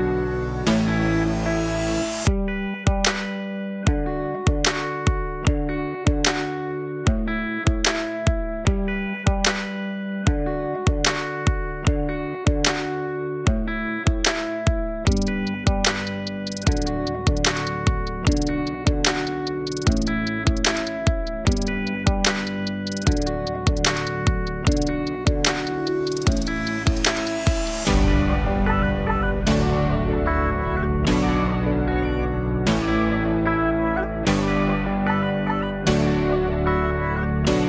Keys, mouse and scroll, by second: 5.3 click, 8.0 click, 22.5 m, 22.7-27.8 alt+drag, 28.1-31.2 drag, 31.2 KP_1, 31.9 Tab, 33.0 Tab, 34.8 click.